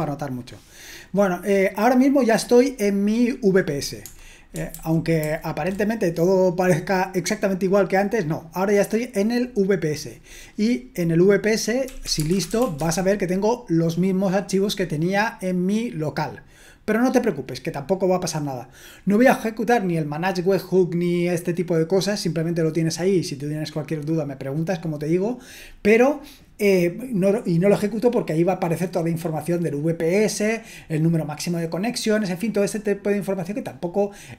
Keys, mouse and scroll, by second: 4.7 super+h, 5.2 super+h, 11.6-13.1 typing.